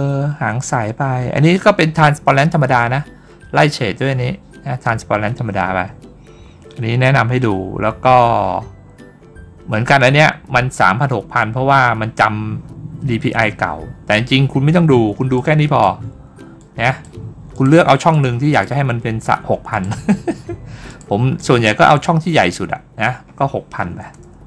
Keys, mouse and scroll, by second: 15.2 click, 16.4 click, 17.4 click, 18.0 click, 19.6 click, 20.7 click, 21.2 click.